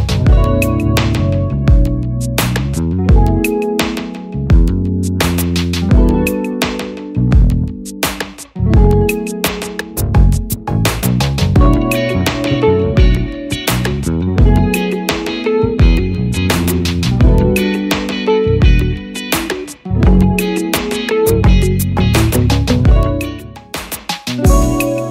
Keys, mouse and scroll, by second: 1.6 double click.